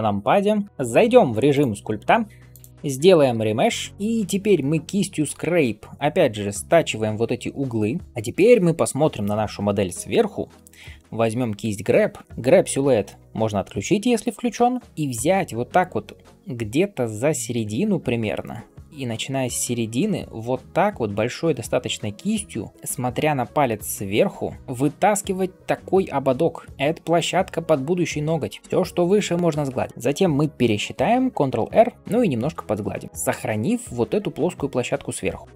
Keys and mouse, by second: 1.4-12.2 drag, 3.2 shift+r, 14.5-16.8 middle drag, 14.5 n, 16.0 [, 16.1 [, 16.8-35.5 drag, 19.9 ], 20.1 ], 31.9 ctrl+r.